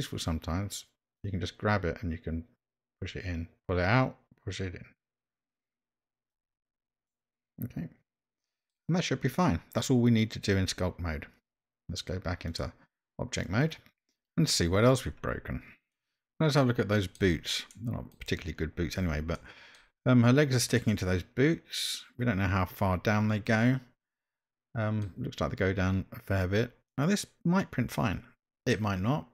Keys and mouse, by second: 1.2-6.3 drag, 7.1-8.7 middle drag, 12.5-13.8 drag, 15.9-17.2 middle drag, 17.7 middle click, 19.4-19.7 shift+middle drag, 20.8-25.0 middle drag, 26.9-28.7 middle drag.